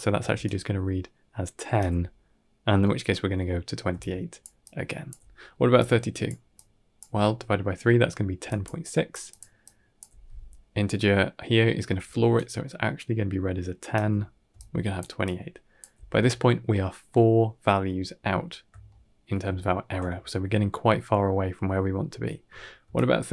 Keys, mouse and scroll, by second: 0.1 d, 0.3 right click, 1.6 d, 1.7 d, 3.7-6.9 typing, 3.8 click, 4.5 click, 5.6 click, 6.4 click, 8.2-9.9 typing, 8.3 click, 8.7 click, 9.1 click, 9.5 click, 11.9 d, 12.5-13.8 right drag, 13.8-15.8 typing, 14.4 click, 15.1 click, 18.7-19.1 shift+middle drag, 19.4-19.8 ctrl+middle drag, 19.9 middle click, 22.7-23.3 typing, 22.8 click.